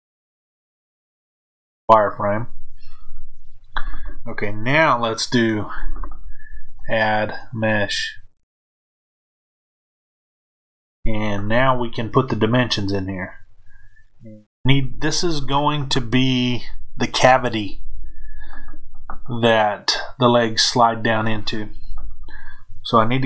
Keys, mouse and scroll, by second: 6.6-23.2 drag.